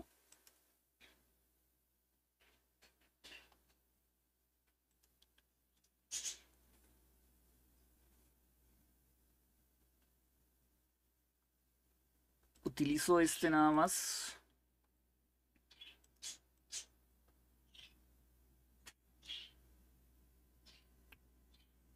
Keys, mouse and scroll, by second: 0.0 click, 0.8 click, 4.5-5.5 drag, 5.8 click, 12.2 click, 13.4 click, 15.7-18.9 drag.